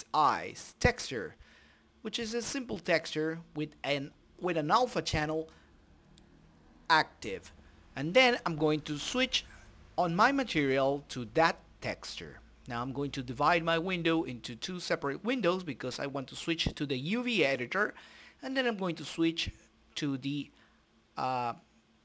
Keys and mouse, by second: 7.5-8.7 drag, 10.4-11.4 drag, 12.0-13.1 drag, 13.2 t, 14.1-15.3 drag, 15.5-16.9 middle drag, 17.3-18.5 drag, 20.2-21.9 middle drag, 21.9 click.